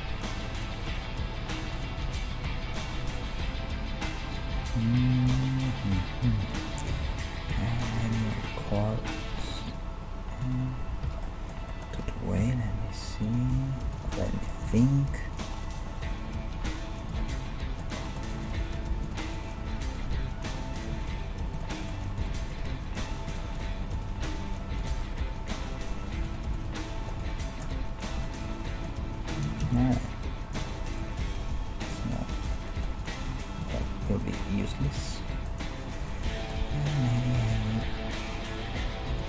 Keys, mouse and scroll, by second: 1.8-3.7 right drag, 2.0 g, 4.1-6.0 middle drag, 6.9 k, 11.3-13.6 middle drag, 12.4 k, 14.3 middle click, 14.8 ctrl+Tab, 15.6-17.3 right drag, 16.5 g, 18.4-19.8 middle drag, 18.4-21.9 right drag, 18.8 g, 20.5 g, 20.9 g, 22.7 g, 23.4-25.0 right drag, 24.2 g, 25.7 middle click, 26.0 g, 26.7 middle click, 26.7 g, 29.7 alt+m, 29.9 middle click, 30.9 middle click, 31.2-32.9 drag, 31.4 g, 32.9 middle click, 33.0 click, 33.3 g, 34.8 click, 36.4-37.9 middle drag, 36.7 e.